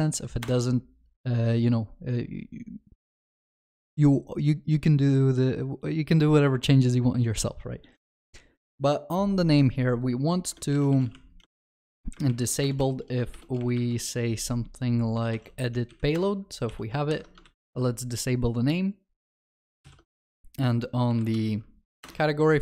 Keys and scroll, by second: 11.5 Return, 13.3 ctrl+BackSpace, 17.6 ctrl+c, 19.8 ctrl+s, 19.9 ctrl+shift+n.